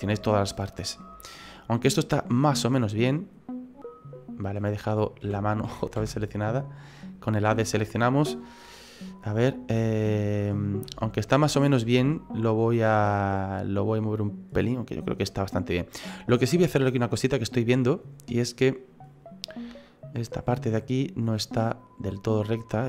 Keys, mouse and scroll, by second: 0.4 middle click, 3.4-5.2 scroll down 7, 5.2-5.6 scroll down 2, 5.2 a, 5.6 a, 6.0 a, 6.5-7.6 scroll up 12, 7.6 shift+middle click, 8.6 alt+shift+right click, 9.5 right click, 9.9 alt+shift+right click, 11.1 shift+right click, 11.4 middle click, 12.4 shift+right click, 13.0 middle click, 16.7-17.3 scroll down 3, 17.1 middle click, 18.6 click, 19.5 right click, 20.2 right click, 20.5 middle click, 21.2 click.